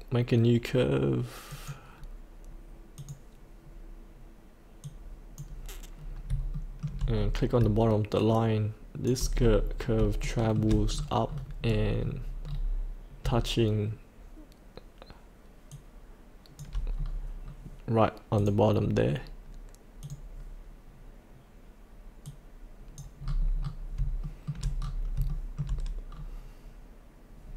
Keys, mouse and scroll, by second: 1.5-6.0 drag, 6.0 scroll down 1, 6.5 shift+middle click, 7.1-7.6 scroll down 1, 8.2 shift+click, 9.4-10.1 scroll up 1, 10.2 shift+middle click, 10.9-11.3 scroll down 1, 11.4-13.2 scroll down 1, 15.7 shift+click, 16.9-17.3 scroll up 1, 18.4 click, 23.3-23.9 scroll up 1, 24.2 shift+middle click, 24.7-25.1 scroll up 1, 25.3 shift+middle click, 26.1-27.5 scroll down 1.